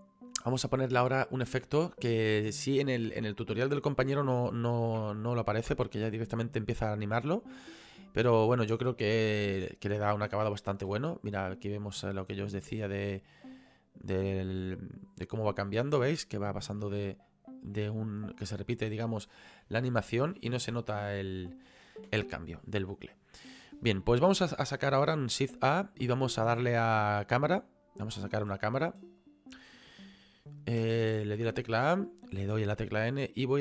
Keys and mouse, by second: 1.9 shift+middle click, 4.5 click, 10.7 click, 10.9 space, 17.7 click, 22.0 space, 22.5 click, 25.5 shift+a, 27.7 click, 29.2 click, 30.8 KP_0, 32.8 n.